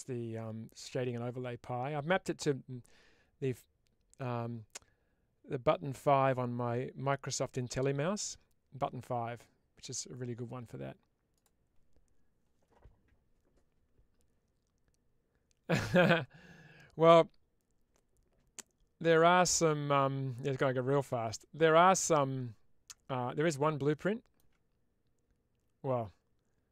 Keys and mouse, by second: 23.3-24.4 alt+middle drag.